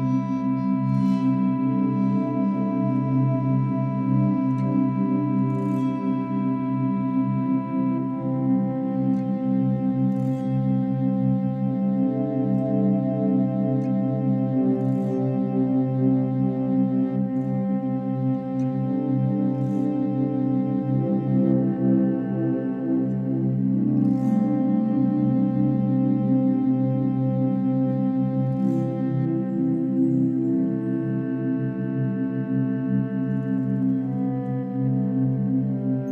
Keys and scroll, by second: 23.5 ctrl+z, 23.7 space.